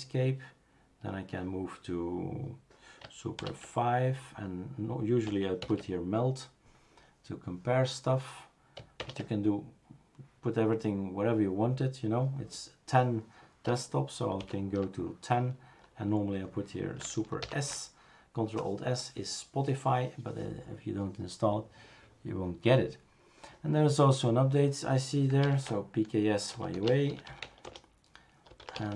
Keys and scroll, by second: 3.7 super+(, 5.6 super+F5, 9.0 super+Return, 14.7 super+à, 17.4 ctrl+alt+s, 25.4 ctrl+alt+t, 26.5-28.9 typing.